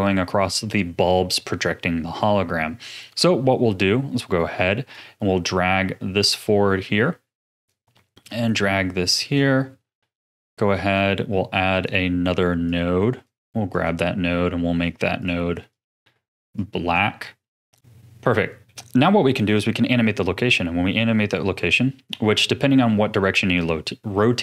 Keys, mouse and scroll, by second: 2.9 ctrl+s, 4.9-7.9 drag, 8.2-13.8 drag, 15.2 click, 15.7 click, 18.6-20.2 middle drag, 20.2-23.2 drag.